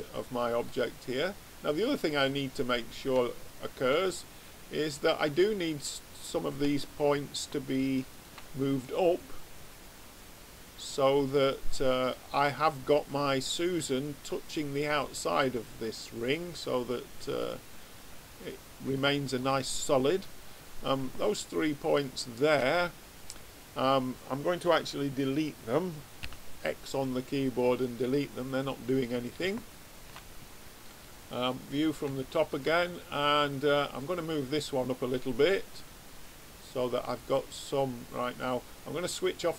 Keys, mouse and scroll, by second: 1.8 click, 3.1 middle click, 3.4 right click, 3.5-5.4 middle drag, 6.7-8.1 middle drag, 18.9-20.5 middle drag, 20.5-23.9 drag, 26.1 x, 28.8 middle click, 29.8 middle click, 30.0 middle click, 30.9 click, 32.1 middle click, 32.6-33.9 middle drag, 33.9 click, 34.4 middle click.